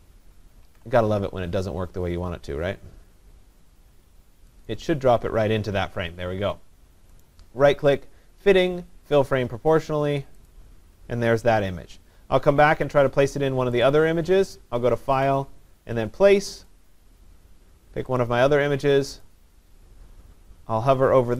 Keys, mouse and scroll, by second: 0.7 ctrl+z, 4.7 click, 7.2 right click, 10.5 click, 13.9 click, 15.3 click, 16.7 click.